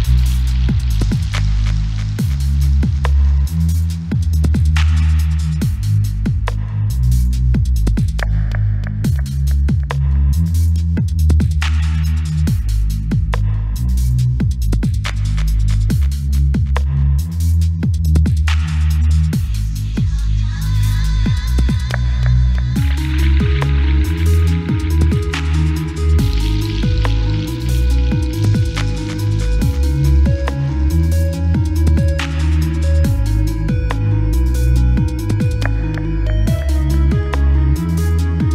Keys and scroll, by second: 20.7-25.0 typing, 25.3 super+Down.